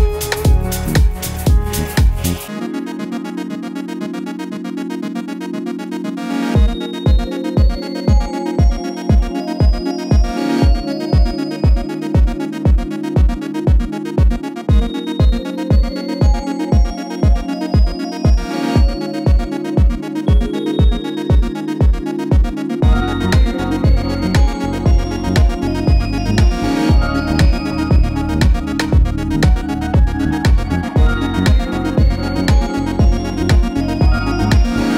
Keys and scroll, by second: 28.7 d, 30.1 d.